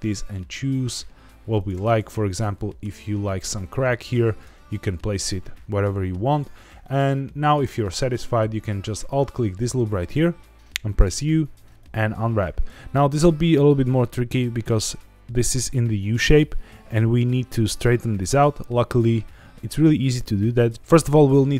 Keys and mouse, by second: 1.5 click, 2.8 Tab, 4.4 Tab, 5.0-6.1 middle drag, 6.8 middle click, 11.0 u.